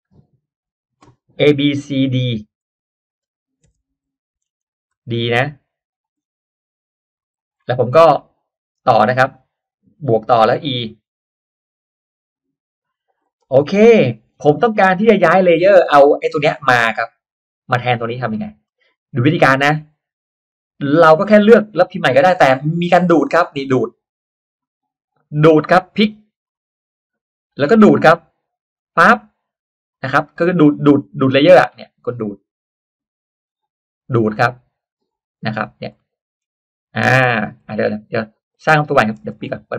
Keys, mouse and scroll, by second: 2.6 d, 3.8 BackSpace, 4.5 Caps_Lock, 4.9 d, 5.8 click, 6.1-6.4 scroll down 1, 7.2 click, 7.5 scroll up 1, 7.8 click, 9.0-9.3 scroll up 1, 10.4 click, 11.6 e, 12.2 click, 13.0 click, 13.5 click, 13.5 space, 13.9 middle click, 14.4-15.0 scroll down 2, 15.8 middle click, 15.8-16.2 scroll up 1, 18.6 middle click, 18.6 scroll up 1, 19.4 middle click, 19.4-19.8 scroll up 1, 20.8 click, 21.3-21.7 drag, 22.2 click, 26.5 click, 28.7 click, 31.1 scroll down 1, 31.2 middle click, 31.4 scroll up 1, 31.6 middle click, 31.7-32.5 scroll down 1, 32.5 click, 34.0 click, 35.5-35.8 scroll down 1, 36.0 middle click, 36.0-36.4 scroll up 1, 36.4-37.0 scroll down 1, 37.4 scroll up 1, 38.4 click, 38.9 middle click, 39.3 click.